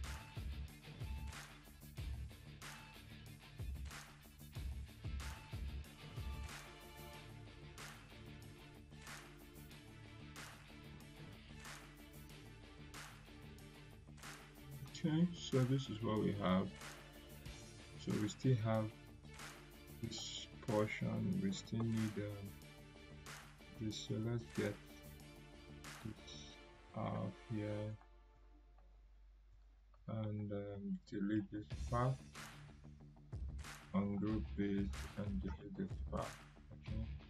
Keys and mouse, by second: 6.7 click, 9.8 click, 14.9 click, 15.8 right click, 17.3 click, 20.0 right click, 20.8-21.4 drag, 25.8-27.0 click, 26.7 right click, 27.9 click, 31.2 click, 31.4 Delete, 32.4 click, 35.6 Delete, 36.4 click.